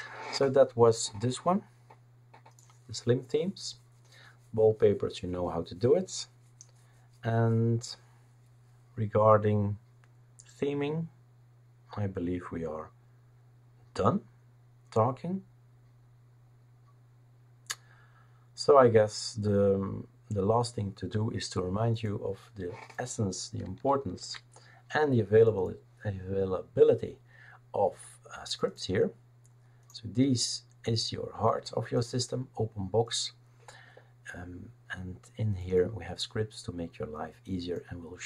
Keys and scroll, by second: 24.2 ctrl+h.